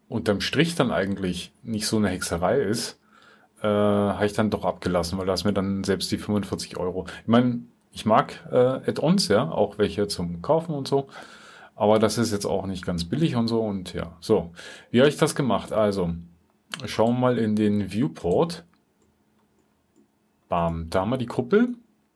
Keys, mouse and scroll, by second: 21.6 typing.